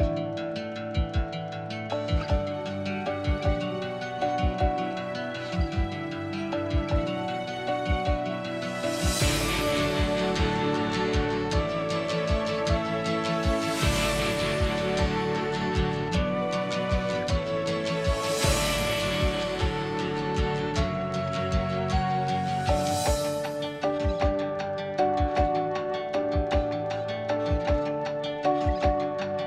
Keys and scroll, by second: 2.1 Delete, 6.1 ctrl+s, 19.8 b, 21.0 Escape, 26.1 l, 27.9 typing, 28.1 Return.